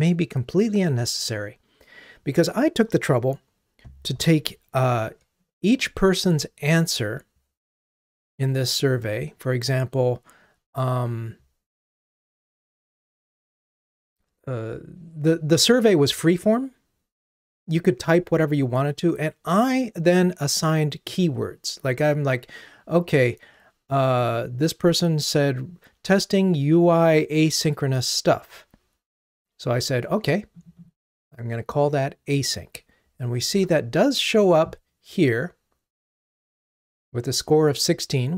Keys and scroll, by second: 5.7 ctrl+Tab, 33.9 ctrl+Tab.